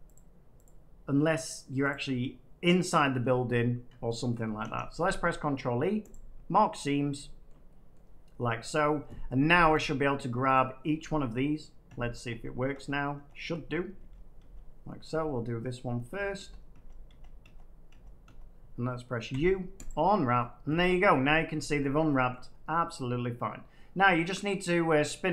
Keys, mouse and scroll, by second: 4.5 ctrl+e, 6.0 click, 6.8 click, 7.0 click, 7.4 shift+middle click, 7.9 middle click, 8.7 middle click, 9.7-11.3 drag, 11.8-14.4 typing, 14.7 middle click, 14.8 middle click, 15.5 middle click, 16.0-18.2 typing, 19.2 u, 19.8 click, 21.6 Tab, 22.2 scroll up 1, 22.4-23.6 scroll down 8, 24.2 shift+middle click, 24.7 middle click, 25.2 Tab.